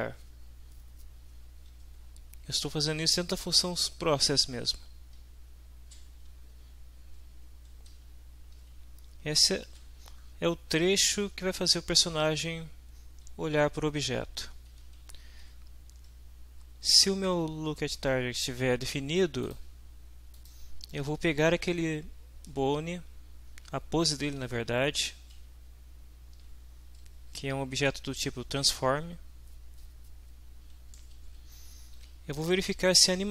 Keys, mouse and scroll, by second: 1.9 Up, 2.9 Home, 3.6 shift+End, 5.2 Down, 7.2 Up, 7.9 Home, 8.5 shift+End, 14.2 Down, 14.7 Home, 15.4 shift+End, 19.4 click, 20.3 click, 24.5 shift+Right, 26.8 shift+Left, 30.9 Down, 31.2 Left, 31.9 End.